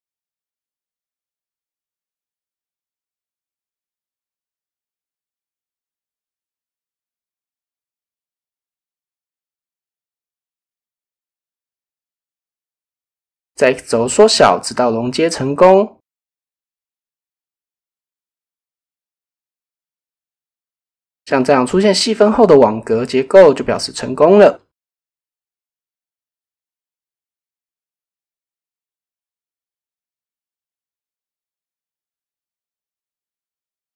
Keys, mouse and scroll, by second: 0.0 click, 1.5-2.7 drag, 3.2 shift+middle click, 6.3 x, 9.8-10.2 shift+drag, 10.6 shift+middle drag, 11.8-12.8 typing, 16.5 shift+click, 17.3 shift+click, 18.0 s, 18.3 x, 21.5 shift+click, 22.7 KP_7, 24.8 middle click, 25.8 middle drag, 26.1-28.6 middle drag, 29.1 KP_7, 30.3 Tab, 30.8 KP_1, 31.8 shift+middle click, 32.4 shift+middle click, 33.4 middle click.